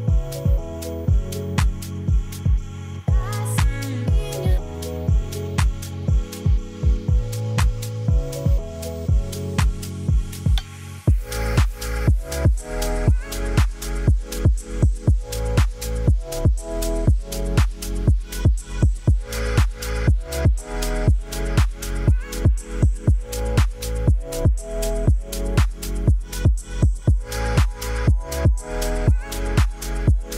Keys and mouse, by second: 0.7 click, 2.8 click, 4.5 click, 4.9 click, 5.3 click, 5.8-6.5 middle drag, 8.4 click, 8.9 click, 9.3-10.6 middle drag, 11.3 click, 12.4 shift+d, 14.0 click, 14.9-16.4 drag, 17.4 middle drag, 18.1 middle click, 20.5 click, 21.5 click, 21.8-24.1 middle drag, 24.2 middle click, 26.8 click, 29.3 click.